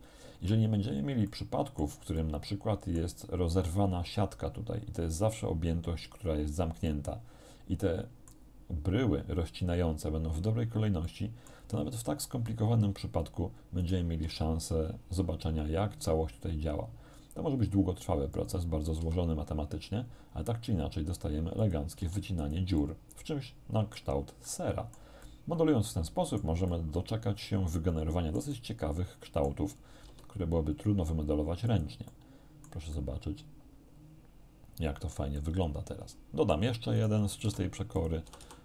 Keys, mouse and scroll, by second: 1.3 shift+middle click, 2.2-3.2 shift+middle drag, 6.9-8.5 middle drag, 11.1 shift+middle click, 13.8 right click, 14.3 g, 18.4 click, 18.9 r, 21.6 click, 22.0 g, 22.4 click, 22.8-24.2 middle drag, 24.5 middle click, 25.3-26.6 middle drag, 26.8-29.7 middle drag, 30.1 g, 31.7 click, 32.2 middle click, 36.0 middle click, 37.0 right click, 37.5 shift+d, 38.0 shift+click, 38.3 shift+r.